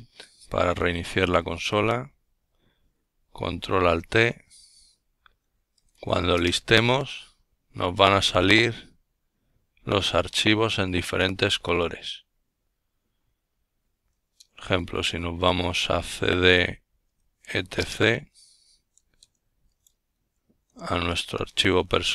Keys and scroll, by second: 0.0-0.7 typing, 1.8-2.5 typing, 5.4-6.8 typing, 8.2-10.1 typing, 16.8-19.3 typing, 20.5-21.3 typing, 21.4 Return.